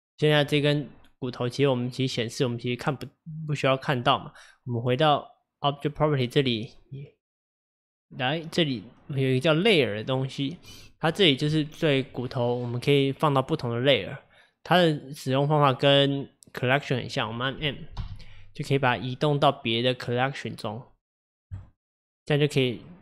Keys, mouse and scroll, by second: 1.4-4.4 middle drag, 4.8 click, 6.4-9.5 drag, 18.0 m, 22.9-23.0 middle drag.